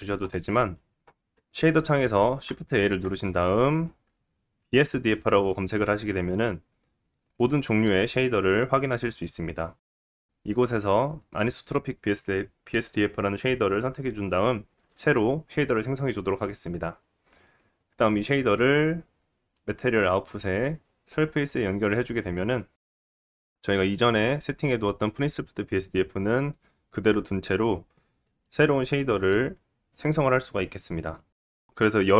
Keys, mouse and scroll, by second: 1.5-4.1 middle drag, 1.5 shift+a, 2.8 shift+a, 5.4-9.8 middle drag, 17.6-19.8 drag, 19.7-20.3 scroll up 4, 20.3 middle click, 20.9-21.3 scroll up 2, 21.3 scroll down 1, 22.0 click, 23.1-23.4 scroll up 1, 23.4 middle click, 23.5-23.9 scroll down 1, 23.9 click, 26.9-29.0 drag, 27.9 scroll up 2, 28.3 middle click, 29.0-31.7 middle drag, 31.7-32.1 drag, 31.7-32.0 scroll down 2.